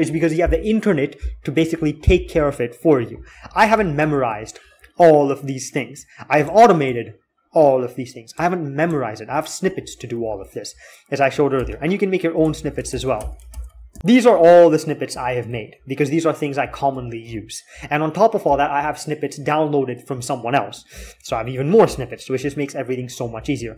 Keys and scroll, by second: 3.3 alt+x, 10.0-10.4 k, 11.5-15.7 typing, 17.0-17.4 k, 18.5 typing, 20.7-22.0 typing, 23.1-23.7 typing.